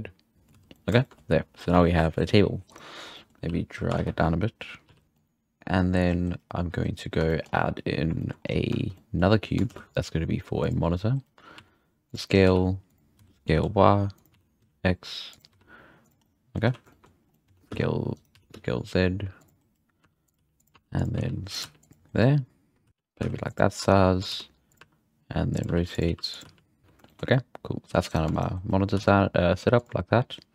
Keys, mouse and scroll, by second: 0.3 middle click, 0.5 z, 0.7-1.9 middle drag, 1.9-2.7 scroll up 1, 2.7-3.1 right drag, 3.1 middle click, 3.4 h, 4.1 ctrl+z, 4.8 g, 5.0-5.6 middle drag, 5.6-6.8 scroll down 4, 7.2 shift+middle drag, 7.4-8.1 scroll up 4, 8.2 shift+middle click, 8.3-8.9 scroll down 4, 8.9-9.6 middle drag, 9.6 shift+a, 11.6 s, 12.2-12.7 scroll up 4, 12.4 g, 13.1 s, 14.3 s, 15.8 s, 16.2-16.7 middle drag, 16.6 z, 16.9-17.6 shift+middle drag, 17.6 z, 18.3 s, 20.0-21.6 typing, 24.3-26.4 typing, 26.8 alt+a, 27.0-28.1 shift+middle drag, 28.1-28.5 shift+right drag, 28.9 g.